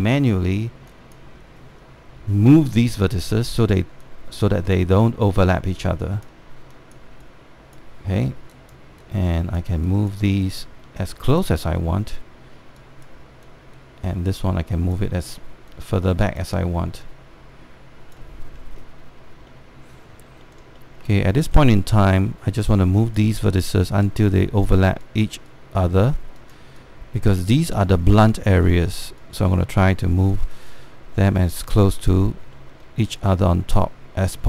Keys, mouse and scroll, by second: 0.5 scroll up 1, 1.1 alt+middle click, 1.6 click, 3.2 w, 3.8-13.4 drag, 13.5 click, 14.3-19.0 drag, 19.0-19.9 scroll down 1, 20.2 alt+middle click, 20.8 alt+scroll up 1, 21.5 alt+middle click, 21.8 alt+middle click, 22.2 alt+middle click, 22.6 alt+middle click, 23.7-28.4 drag, 28.4 alt+middle click, 29.1-32.6 drag, 33.5 alt+middle click, 33.8-34.4 drag.